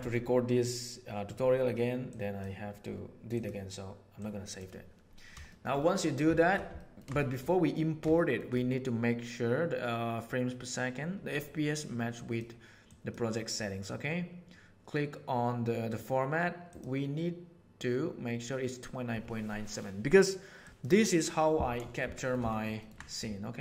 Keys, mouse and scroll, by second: 5.4 shift+middle click, 5.7 middle click, 6.8 ctrl+middle click, 7.4 middle click, 8.2 shift+middle click, 12.1 click, 12.8-13.1 drag, 15.9 click, 16.6-20.8 drag, 22.1 shift+middle click, 22.4 ctrl+middle click.